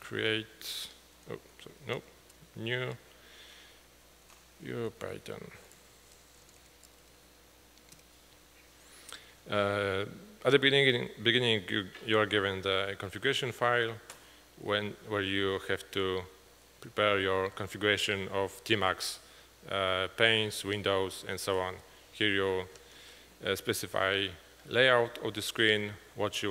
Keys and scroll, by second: 0.0-2.9 typing, 4.1-8.5 typing, 8.0 Return, 13.8-14.8 Down, 15.6 Down, 16.1 Down, 16.2 Down, 17.1 Down, 21.7 Up.